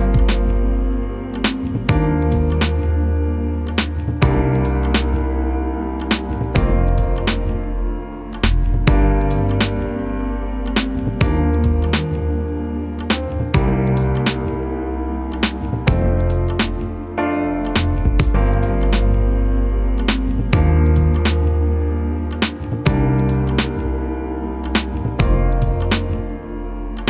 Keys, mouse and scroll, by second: 0.1-5.8 drag, 6.3 alt+scroll down 1, 7.8-14.2 drag, 14.2-19.6 shift+drag, 19.6-24.5 shift+drag, 24.9 alt+scroll down 1, 26.4-27.0 drag.